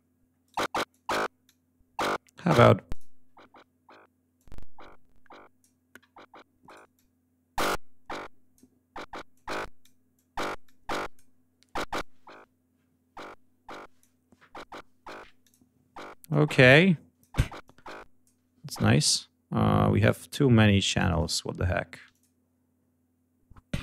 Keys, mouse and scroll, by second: 0.3 right click, 0.8 click, 1.3 click, 2.8 click, 4.2-5.7 drag, 6.5 right click, 6.8-8.6 drag, 9.2 click, 10.0-11.2 drag, 11.8-14.1 drag, 15.3 click, 16.2 click, 17.5 click, 18.7 space, 21.0 right click, 22.0 click.